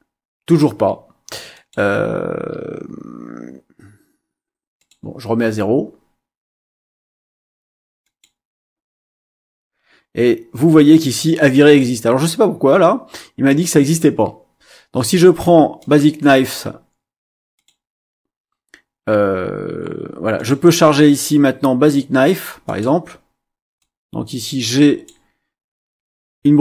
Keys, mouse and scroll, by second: 1.5 click, 4.7 click, 8.0 click, 15.8 click, 17.5 click, 20.3 click, 22.6 click, 23.8-25.2 drag.